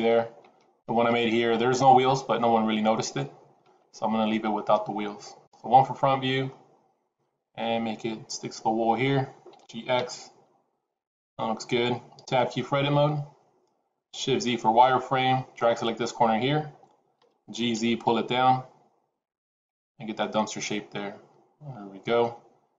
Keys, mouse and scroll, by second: 5.3 KP_1, 6.4-7.3 scroll up 2, 7.3-7.7 scroll down 1, 8.4 scroll down 1, 9.5 g, 12.8 Tab, 14.3 shift+z, 15.4 click, 17.1 g, 19.9 scroll down 2, 20.1 middle click.